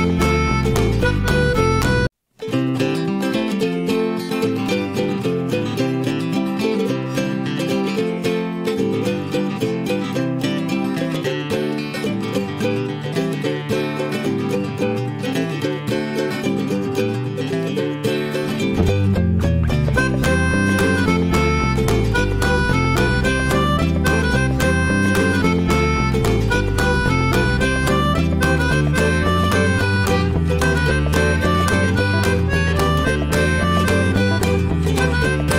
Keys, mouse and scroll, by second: 0.0 shift+middle click, 0.6 drag, 0.9 click, 2.0 click, 3.2 drag, 3.9 Delete, 4.0 drag, 4.3 scroll down 1, 4.5-5.0 middle drag, 5.0-5.3 scroll up 2, 5.3 click, 6.0 right click, 6.6 drag, 6.9-8.7 middle drag, 8.7 Tab, 9.0 click, 9.5 shift+middle click, 10.2 ctrl+b, 13.3 middle click, 14.2 Tab, 14.7-15.6 shift+middle drag, 15.6 scroll up 1, 15.8-17.5 shift+middle drag, 17.5 Tab, 17.8 click, 18.1 middle click, 19.0 shift+click, 19.3-20.4 shift+middle drag, 20.4 ctrl+b, 22.5 Tab, 22.7 click, 22.9 scroll down 1, 23.1-24.9 shift+middle drag, 24.9 scroll up 2, 25.1 middle click, 25.5 Tab, 25.7 click, 26.0 middle click, 26.6 ctrl+b, 28.3 click, 29.0-30.3 shift+middle drag, 30.3 shift+click, 30.7 middle click, 31.1 ctrl+b, 33.2 Tab, 33.3 click, 33.5 scroll down 1, 33.7-35.2 shift+middle drag, 35.2 click, 35.5 shift+middle click.